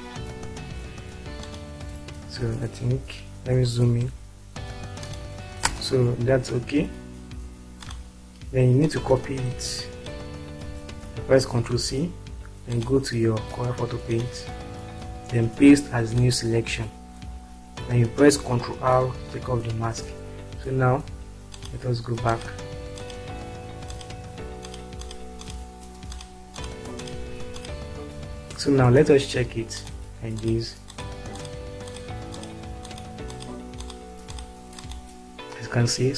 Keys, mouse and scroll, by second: 1.4 click, 3.2 click, 5.0 click, 5.9 space, 6.3 click, 6.6-7.7 scroll down 4, 10.0 click, 11.6 ctrl+c, 19.7 ctrl+r, 21.4 click, 24.6 click, 26.5 click, 27.0 click, 29.8 click, 32.0 click, 34.0 click.